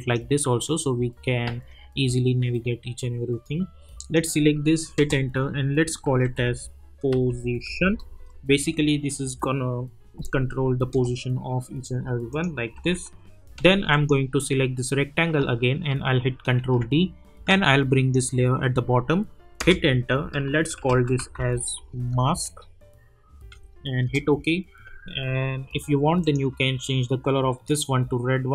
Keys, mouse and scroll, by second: 4.9 Return, 5.9-8.5 typing, 10.9 Return, 12.3 click, 12.7 u, 13.9 click, 16.6 ctrl+d, 17.5-18.1 drag, 19.6 Return, 20.5-22.3 typing, 23.5 typing, 24.0 Return, 26.2 click.